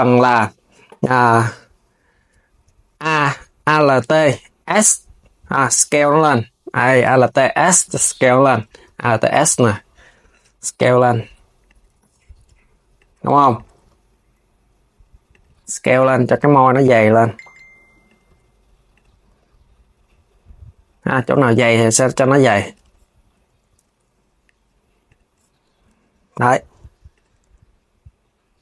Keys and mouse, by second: 10.4 r, 11.6 z, 12.6 click, 13.2 click, 13.5 alt+s, 15.0 alt+s, 15.8 click, 16.2 alt+s, 17.8 alt+s, 18.6 click, 18.9 alt+s, 20.9 alt+s, 22.1 Tab, 22.3 click, 23.2 s, 24.7 click, 25.6 KP_3, 26.0 Tab, 26.8 click.